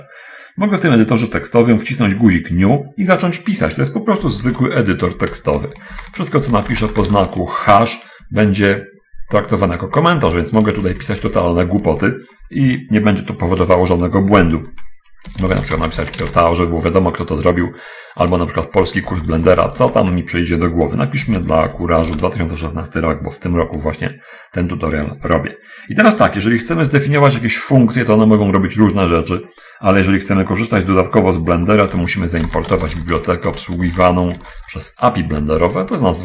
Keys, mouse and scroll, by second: 3.0 click, 4.7 Return, 6.0-7.5 typing, 9.0 ctrl++, 9.2 ctrl++, 11.1 ctrl+shift+Left, 11.4 ctrl+shift+Left, 15.6-16.6 typing, 19.5 BackSpace, 19.7 BackSpace, 19.8 BackSpace, 21.9 0, 21.9 1, 21.9 6, 22.5 Return, 32.1 Return, 32.8-34.9 typing, 36.1 Return.